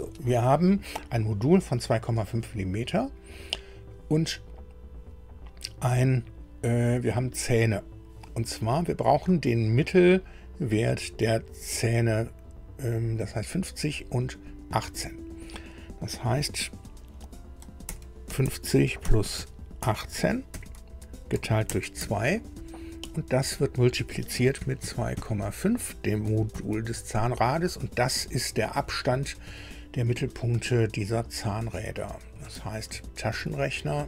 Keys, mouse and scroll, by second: 17.6-20.5 typing, 21.7-23.2 typing, 24.6 KP_2, 24.8 KP_Decimal, 25.2 KP_5, 28.2 Right, 28.6 Right, 28.7 Right, 28.8 Right, 28.8 Right, 32.8 alt+Tab, 33.3 alt+Tab.